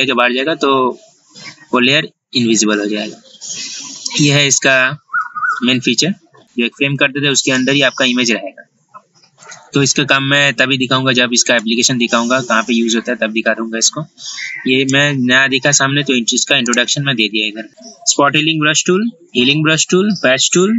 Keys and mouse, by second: 16.8 right click.